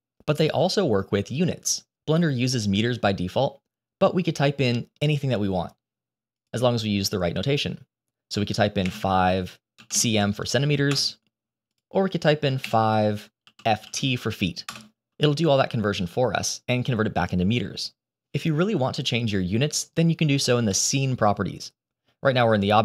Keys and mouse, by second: 6.3-10.9 drag, 11.6-14.7 drag.